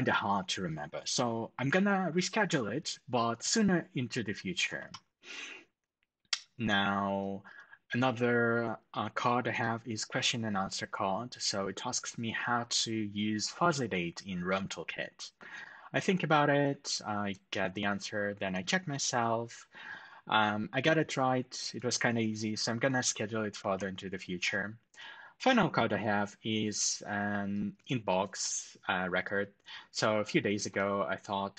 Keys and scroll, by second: 4.5 ctrl+alt+shift+super+@, 23.3 ctrl+alt+shift+super+$.